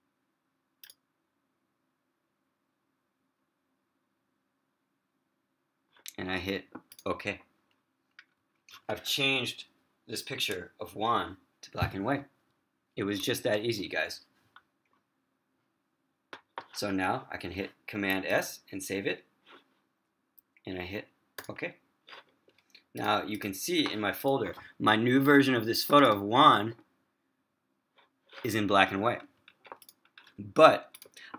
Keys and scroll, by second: 18.5 super+s.